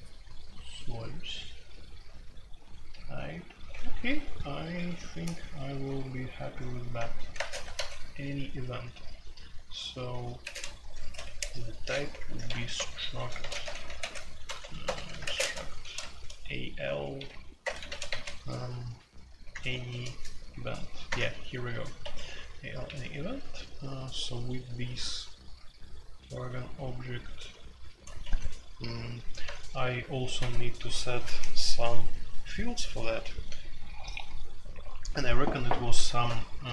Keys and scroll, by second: 3.7-4.6 typing, 5.8 typing, 6.9-7.7 typing, 9.1-15.3 typing, 11.2 Escape, 17.1-18.1 typing, 19.4-19.9 typing, 21.0 Return, 21.7-22.8 typing, 28.2 Escape.